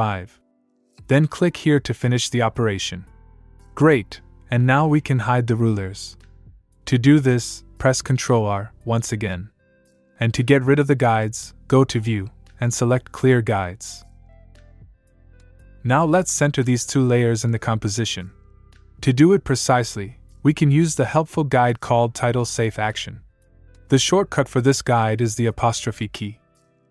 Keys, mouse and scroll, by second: 0.5 Down, 2.6 click, 4.8 click, 8.8 ctrl+Num_Lock, 8.9 ctrl+r, 13.0 click, 20.8 click, 24.8 click, 26.8 '.